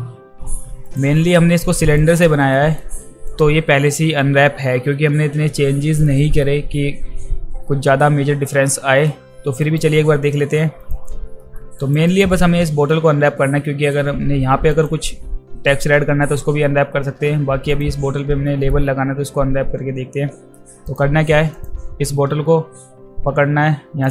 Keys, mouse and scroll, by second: 0.9 click, 1.3 alt+click, 2.0 alt+right drag, 2.5 alt+middle click, 3.3 click, 6.0-6.4 alt+middle drag, 8.8 alt+middle click, 9.6 alt+right click, 10.8 click, 11.4 alt+middle click, 11.8 alt+right click, 12.1 alt+right click, 13.6 alt+middle drag, 14.7 click, 17.7 click, 18.5 alt+middle click, 20.8 click, 21.6 click, 24.0 click.